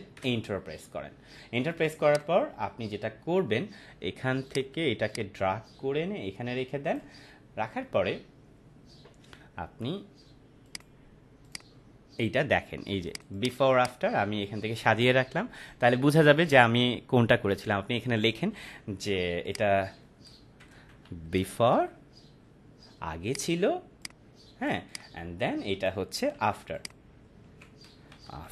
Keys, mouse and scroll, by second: 2.1 click, 4.4 click, 5.1-6.9 shift+drag, 10.6 click, 13.0 right click, 13.1 right click, 13.3-14.7 drag, 18.8 t, 19.4 click, 20.3-22.2 typing, 23.3-26.1 drag, 26.3 t, 26.7 click, 27.4 ctrl+a, 27.9-28.5 typing.